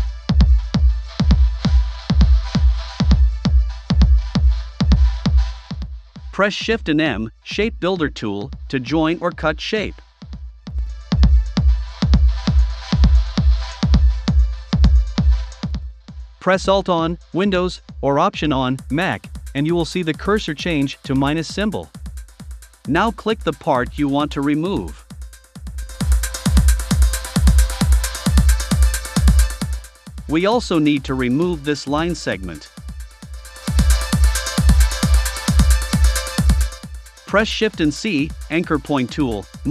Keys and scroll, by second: 31.3 v.